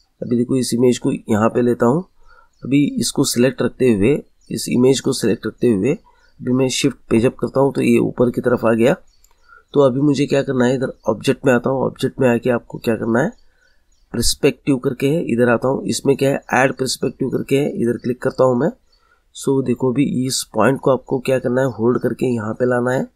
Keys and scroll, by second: 7.1 shift+Page_Up.